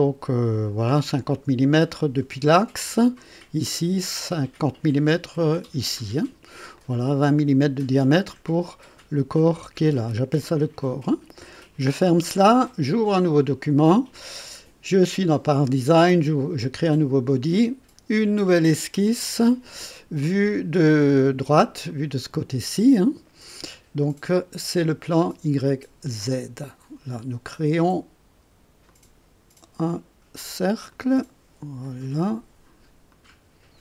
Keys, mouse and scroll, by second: 0.9 click, 1.8 click, 6.8 click, 12.0 click, 13.3 click, 16.7 click, 18.5 click, 21.9 click, 24.0 click, 26.2 click, 28.9 click, 30.9 click, 31.8 click, 32.2 right click, 33.1 click.